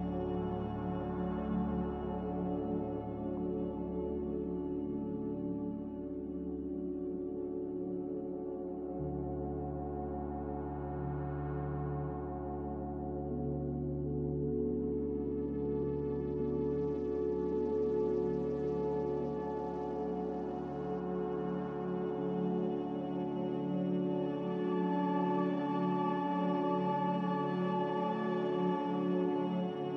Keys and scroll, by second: 2.7 ctrl+c, 9.3 Escape, 12.0-12.8 typing, 15.1-15.8 typing, 17.8 z, 25.8-26.8 typing, 29.4 s.